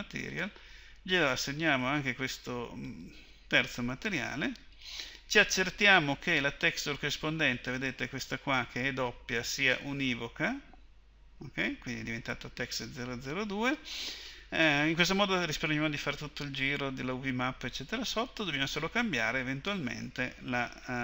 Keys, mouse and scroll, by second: 0.3-16.0 drag.